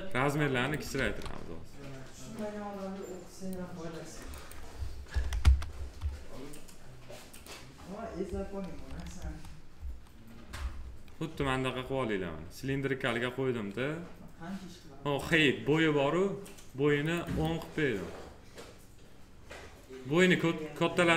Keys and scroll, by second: 0.9 ctrl+z, 5.0 1, 5.3 Return, 9.1 F4.